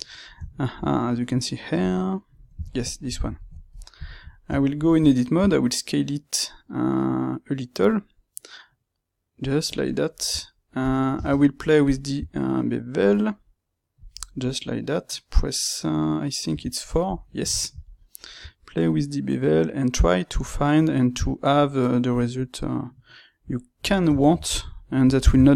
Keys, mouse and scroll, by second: 1.7 click, 2.6-25.5 ctrl+middle drag, 4.5 Tab, 5.3 s, 10.3 Tab, 11.9 space.